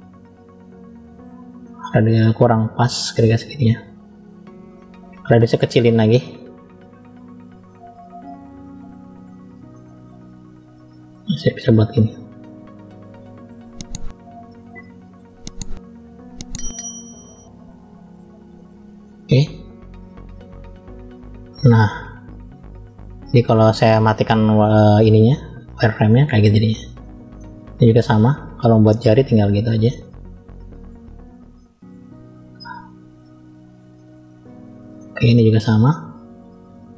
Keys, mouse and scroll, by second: 0.3 click, 2.1-4.0 drag, 10.3 click, 15.3 click, 16.8 click, 24.2-25.8 drag, 27.2-28.8 shift+middle drag, 30.2 click, 34.9 shift+middle click, 36.3 click.